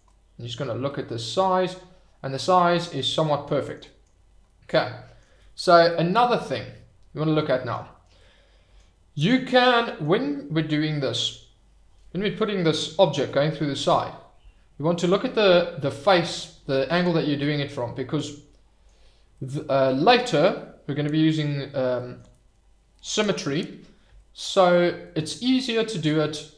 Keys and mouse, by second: 0.1-0.5 middle drag, 0.9-1.8 middle drag, 1.8-3.0 drag, 3.5 shift+middle drag, 3.9 middle click, 4.7 middle click, 5.9-7.9 drag, 5.9-7.9 middle drag, 8.2 click, 8.2 middle click, 9.8 middle click, 17.1 middle click, 18.3 middle click, 19.4 shift+middle click, 25.1 click.